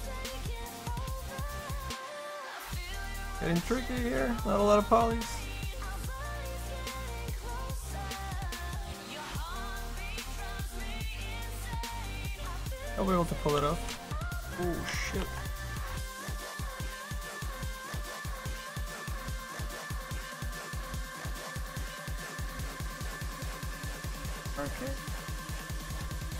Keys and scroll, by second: 13.7 s, 14.4 ctrl+z, 19.6 s.